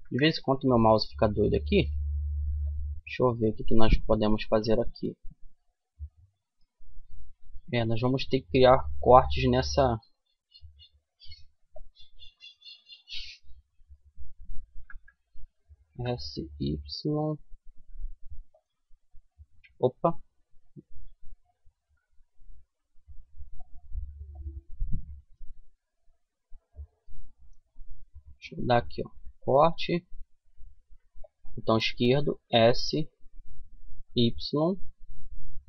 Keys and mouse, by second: 0.1 middle click, 0.5 middle click, 2.3-3.8 middle drag, 6.7 a, 9.0 ctrl+r, 19.1 ctrl+z, 21.3 ctrl+z, 23.7-25.6 drag, 25.1 a, 25.6-27.9 middle drag, 27.9 ctrl+r.